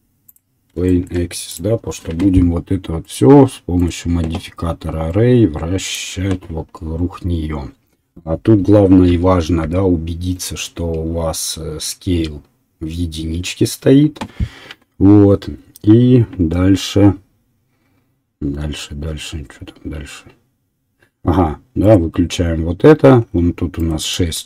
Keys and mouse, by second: 1.5 click, 6.1-14.4 middle drag, 9.1 n, 9.6 n, 21.8 click, 23.8-24.4 drag.